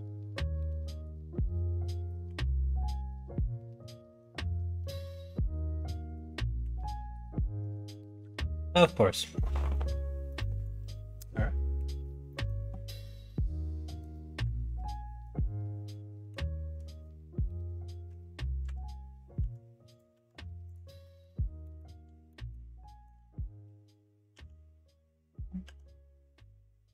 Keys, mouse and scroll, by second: 2.2 shift+r, 4.9 shift+r, 5.8 shift+r, 6.6 shift+r, 10.3 middle click, 11.1 middle click, 12.3 middle click, 12.9 scroll up 1, 13.0 middle click, 13.9 scroll down 1, 15.8 middle click, 18.6 a, 19.3 a, 20.0 a, 21.0 middle click, 21.7 middle click, 22.2 middle click, 22.8 middle click, 24.3 e.